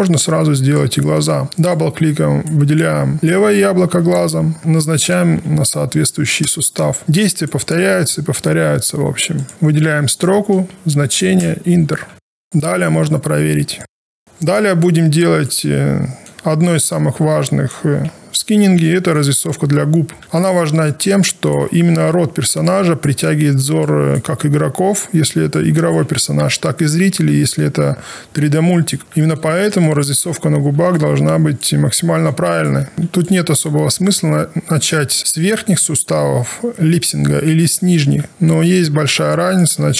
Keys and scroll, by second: 1.5 1.